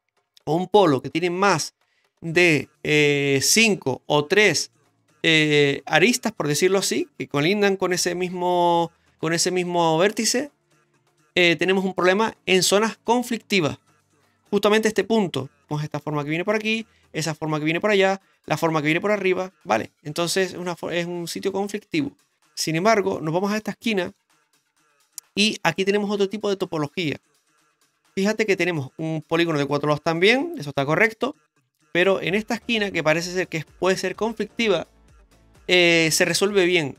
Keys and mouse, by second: 22.5 middle click, 23.1-24.2 shift+middle drag, 26.7 middle click, 32.5 right click.